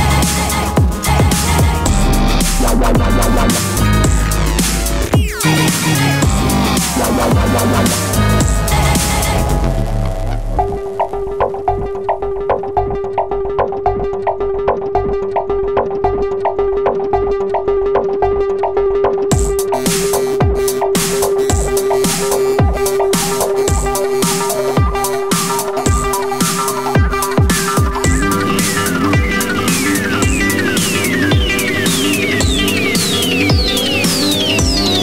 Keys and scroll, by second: 11.7 super+c, 11.9 super+v, 15.2 super+c, 15.4 super+v.